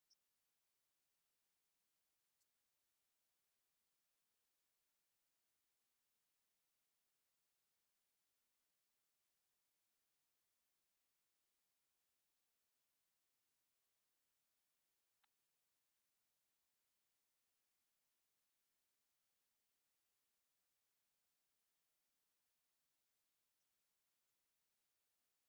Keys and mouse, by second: 21.1 right click, 24.1 click.